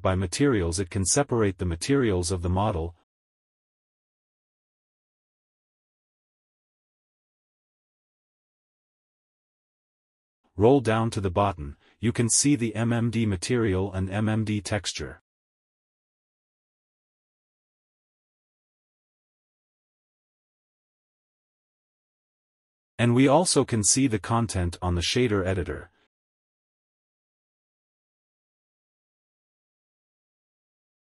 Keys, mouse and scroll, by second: 1.5-7.5 click, 10.4 scroll down 1, 11.0-11.4 scroll down 1, 13.0-13.5 scroll down 8, 14.2 scroll down 3, 15.6-18.8 scroll up 2, 18.9-19.6 scroll down 2, 22.5 middle click, 24.4-24.8 scroll up 3, 24.8 middle click, 26.0-26.5 scroll up 3, 26.5 middle click, 27.0-27.5 scroll up 1, 28.1-29.0 scroll up 2.